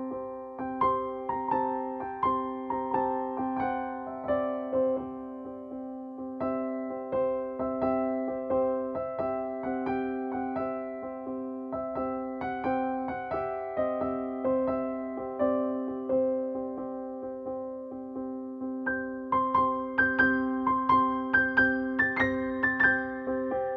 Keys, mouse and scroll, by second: 3.9-6.0 typing, 9.8-17.9 drag, 20.1 alt+shift+click.